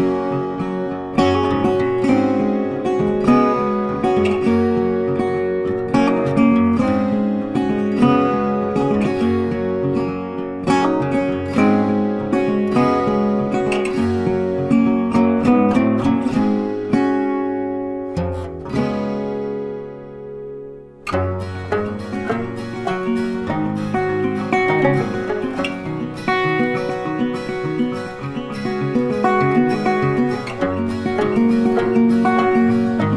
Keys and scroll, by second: 24.3 ctrl+t.